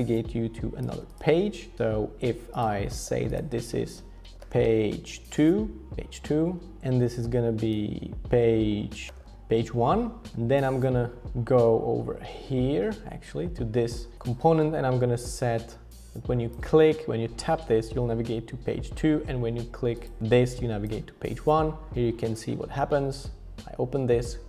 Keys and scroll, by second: 3.0-5.9 typing, 6.0 Escape, 6.8 alt+h, 6.8 alt+v, 8.3 Return, 8.3-9.1 typing, 9.1 super+a.